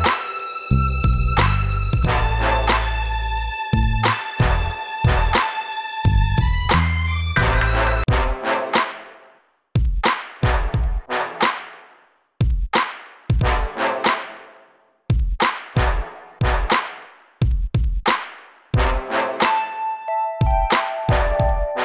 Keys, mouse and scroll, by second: 0.7 click, 1.6 click, 4.6 scroll up 2, 6.5 click, 7.1 click, 7.8 middle click, 8.4 scroll up 2, 9.4 click, 10.4 click, 11.1 scroll down 1, 13.0 click, 14.7 click, 15.5 right click, 16.4 click, 16.7 right click, 18.3 click, 20.0 click, 20.5 click, 21.3 click.